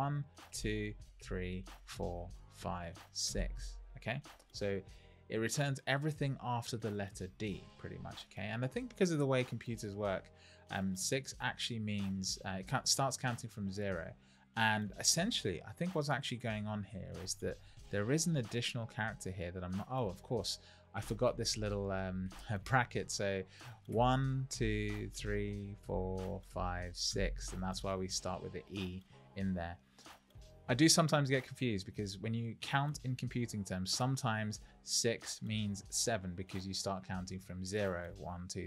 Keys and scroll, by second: 2.5 Left, 16.9 Right, 20.9 Left, 21.2 Right, 21.4 Left, 21.6 Right, 21.8 Left, 22.0 Right, 22.2 Left, 22.9 Right, 23.9 Left.